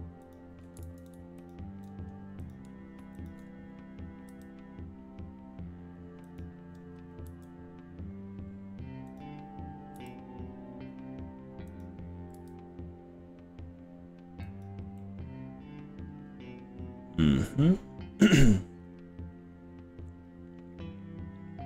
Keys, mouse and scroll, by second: 0.4 click, 1.0 ctrl+z, 1.4 ctrl+click, 2.6 click, 3.2 shift+click, 4.3 g, 6.4 click, 7.3 s, 9.2 click, 10.0 g, 11.8 click, 12.4 s, 14.6 click, 15.0-21.0 middle drag, 21.4-21.6 middle drag.